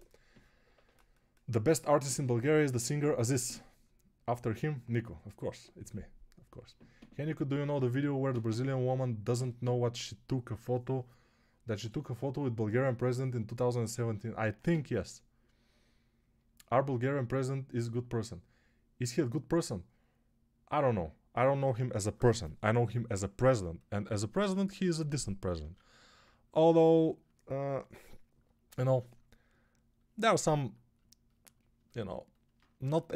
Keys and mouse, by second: 25.5 alt+q, 32.7 3.